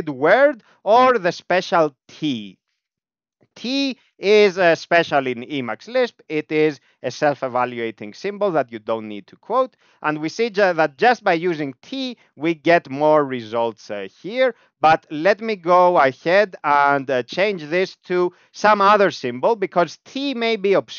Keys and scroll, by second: 0.8 typing, 5.4 ctrl+u, 6.6 Down, 6.8 Down, 7.2 Down, 7.3 Down, 7.5 Down, 7.7 Down, 7.8 Down, 8.0 Down, 8.4 Up, 8.6 Up, 8.9 Up, 8.9 Up, 9.1 Up, 9.2 Up, 9.4 Up, 9.6 Up, 9.7 Up, 10.1 Down, 10.3 Down, 10.6 Down, 10.8 Down, 10.9 Down, 11.1 Down, 11.2 Down, 11.5 Up, 11.7 Up, 12.0 Up, 12.1 Up, 12.2 Up, 12.4 Up, 12.5 Up, 14.8 ctrl+(, 16.0 ctrl+(, 17.0 BackSpace.